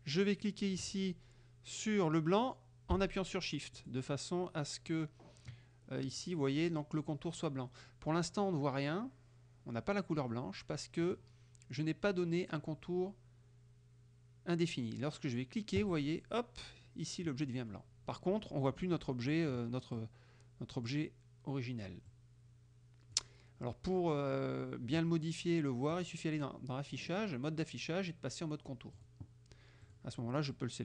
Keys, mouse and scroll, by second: 3.9 shift+click, 10.4 middle click, 11.1 click, 15.9 click, 17.5 click, 19.0 click, 20.0-21.1 drag, 22.2-23.4 drag, 26.0 click, 29.0 click, 29.9 click, 30.5-30.8 drag.